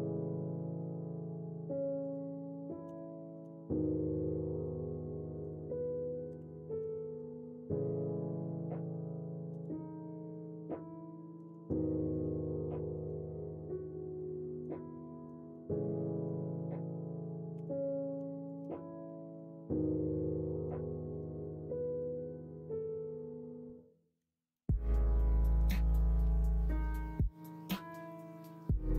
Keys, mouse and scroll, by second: 10.6 middle click, 11.9 shift+middle click, 12.4 middle click, 14.2 middle click, 14.9 middle click, 15.5 middle click, 16.0 middle click, 17.5 3, 19.1 middle click, 20.3 middle click, 21.1 Tab, 21.5-21.9 middle drag, 23.1-24.2 middle drag, 24.5-25.7 middle drag, 26.3-26.9 middle drag, 27.5 shift+middle drag, 28.7 middle click.